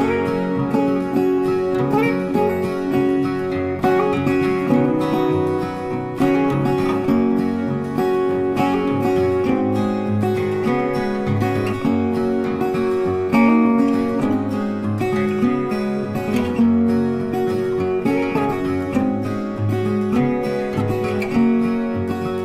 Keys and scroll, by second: 4.6 ctrl+t.